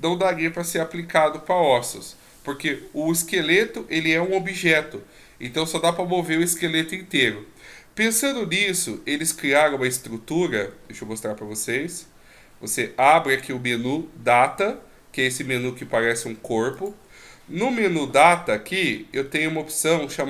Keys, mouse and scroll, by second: 12.8 click, 16.7 click, 18.0-18.8 scroll down 8, 18.8-19.5 scroll up 11.